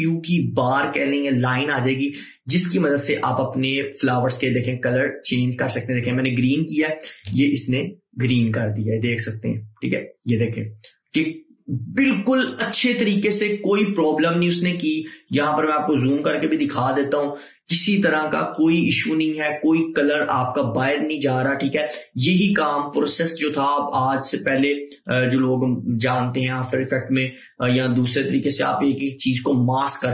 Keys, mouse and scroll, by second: 15.4-23.3 drag.